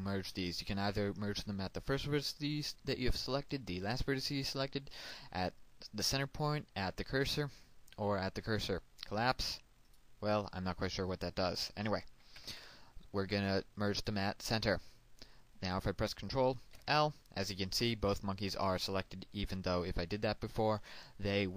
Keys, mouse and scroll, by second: 9.2 click, 12.4 alt+m, 14.0 click, 16.7 ctrl+l.